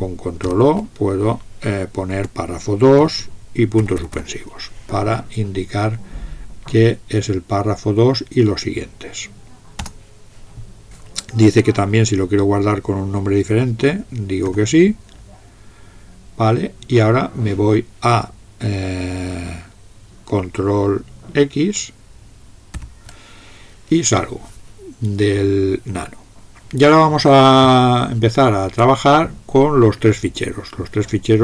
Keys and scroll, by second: 0.4 ctrl+o, 2.1-4.6 typing, 9.8 Return, 14.5 s, 22.7 ctrl+x.